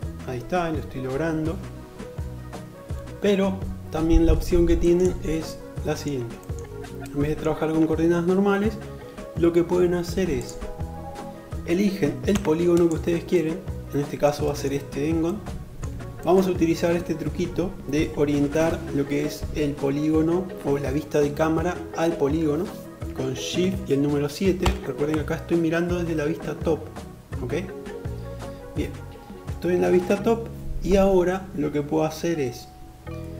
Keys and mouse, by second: 4.3-11.9 middle drag, 11.5 3, 11.9 click, 12.0-33.3 middle drag, 23.8 shift+KP_7.